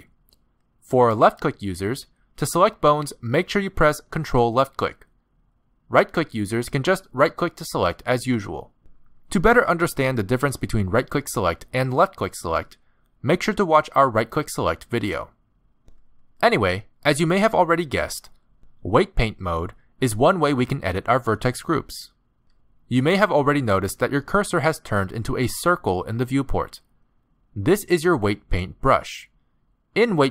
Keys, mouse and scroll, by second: 3.6 ctrl+click, 4.6 ctrl+click, 5.5 z, 7.3 ctrl+click, 8.2 ctrl+click, 9.2 ctrl+click, 10.0 ctrl+click, 19.5 ctrl+click, 20.6 ctrl+click, 21.7 ctrl+click, 23.7 middle click.